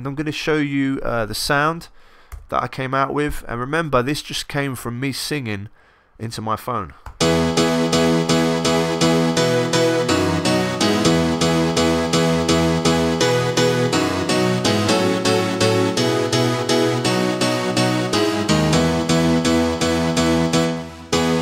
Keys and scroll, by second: 2.3 Return, 7.1 s.